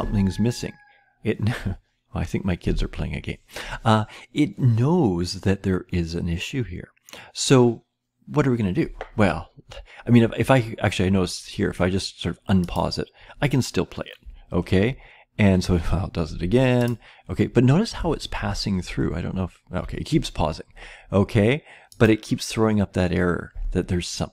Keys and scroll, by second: 14.2-14.8 Left, 17.9 Down, 18.3 Right, 18.8-19.8 Down.